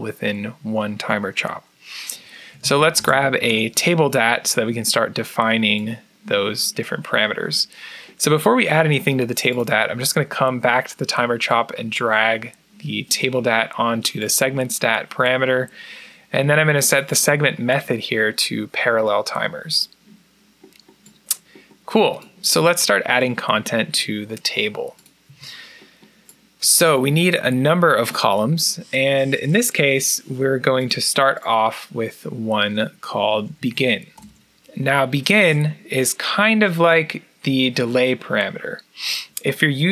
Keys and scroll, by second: 2.1-3.4 typing, 6.3-7.0 typing, 25.1 a, 32.9-35.8 typing.